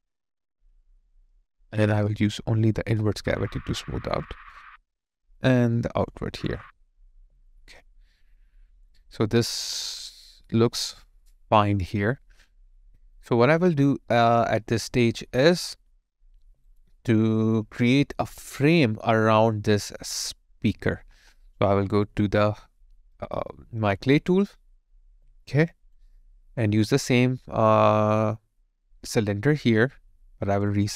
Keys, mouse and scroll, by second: 7.1 alt+right click, 7.5 alt+click, 8.6 alt+right click, 9.0 alt+click, 11.4 alt+right click, 11.7 alt+click, 16.4 alt+right click, 16.8 alt+click, 25.3 alt+click.